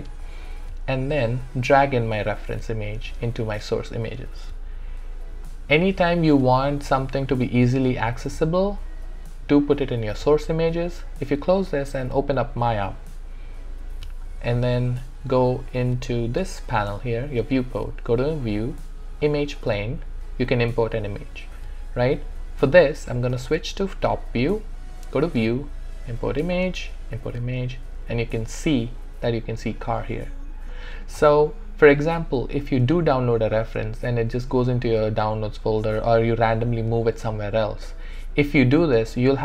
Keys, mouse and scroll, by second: 10.9 click, 18.1 click, 22.7 click, 23.2 space, 25.3 click, 29.5 click.